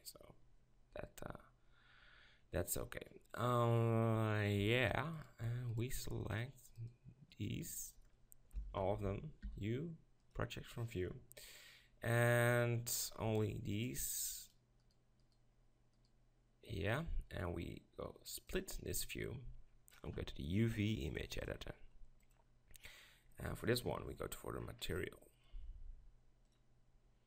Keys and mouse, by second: 0.0-1.6 drag, 1.6 middle click, 5.1-8.8 right drag, 8.8 ctrl+l, 9.5 u, 13.0-18.2 right drag, 18.5-21.1 drag, 22.3 click, 23.9 ctrl+KP_Decimal.